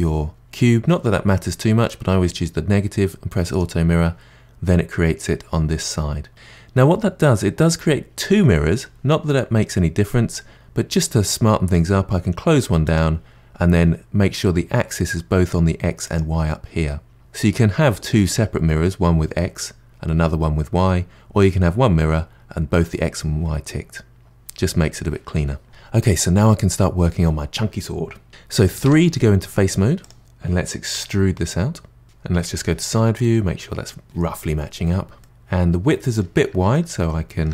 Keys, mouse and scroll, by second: 3.5 click, 6.3-7.5 middle drag, 7.5-10.5 scroll down 2, 12.8 click, 16.0 click, 28.5 middle click, 28.8 3, 30.0 click, 30.9 e, 32.0 KP_1, 35.2-36.7 middle drag, 37.1 middle click.